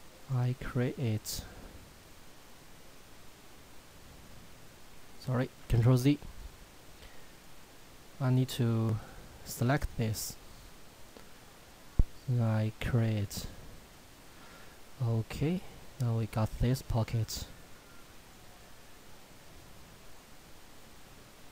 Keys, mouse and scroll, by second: 0.2 click, 3.3-4.2 scroll down 1, 5.6 ctrl+z, 7.3 click, 14.3 shift+middle click, 14.8-16.4 scroll up 1, 16.4 shift+middle click, 18.2 click.